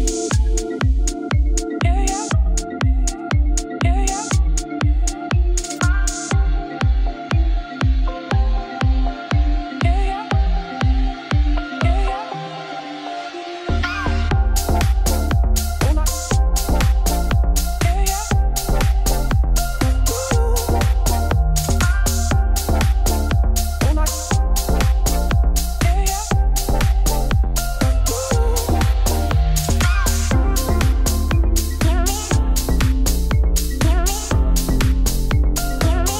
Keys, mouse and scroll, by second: 0.3 middle click, 1.2-3.9 drag, 4.0 click, 5.0 click, 5.6 right click, 6.0 shift+middle click, 6.2-6.7 scroll up 3, 6.7 shift+middle click, 8.0-9.4 drag, 9.4 shift+middle click, 9.8-10.3 scroll down 3, 10.3 middle click, 11.0-11.7 scroll down 1, 11.7-12.1 scroll up 5, 12.1 scroll down 1, 12.3 middle click, 12.6 click, 12.8 click, 13.1 middle click, 13.2 x, 13.6 click, 13.7 click, 14.1 alt+d, 15.3 KP_3, 16.5-18.0 shift+middle drag, 18.0 click, 20.8 click, 21.0 scroll down 5, 21.2-22.2 drag, 22.2 g, 24.6 click, 25.5 g, 26.9 click, 27.0 x, 27.4 click, 27.8 alt+d, 29.5 click, 29.6 middle click, 30.2 ctrl+s, 30.8 click, 31.0 click, 31.2 shift+middle click, 31.5-31.9 scroll down 1, 31.9 shift+click, 32.3 ctrl+l, 33.1 ctrl+z, 33.3 shift+click, 33.9 click, 34.6 shift+click, 35.0 ctrl+l, 35.7-36.1 drag.